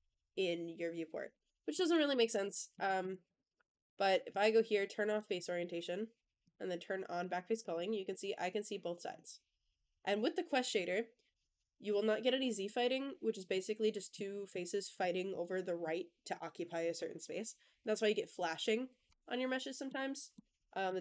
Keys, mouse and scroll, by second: 1.6 middle drag, 2.0 click, 2.2 Tab, 2.4 middle click, 2.9 click, 3.1 Tab, 4.2 click, 5.3 middle drag, 6.3 click, 7.4 click, 7.6-10.0 middle drag, 19.4-19.7 middle drag, 20.0 scroll up 1, 20.2-20.7 middle drag.